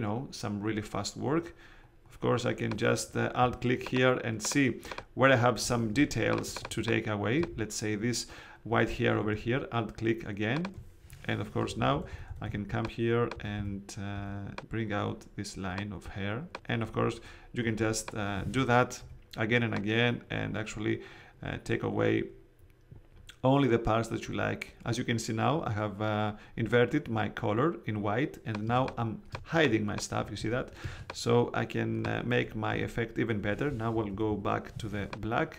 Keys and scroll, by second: 5.8 alt+space, 6.9 space, 11.6 alt+[, 19.0 x, 28.6 space, 30.3 super+z, 30.8 super+space, 31.4 space, 32.6 x, 33.9 ].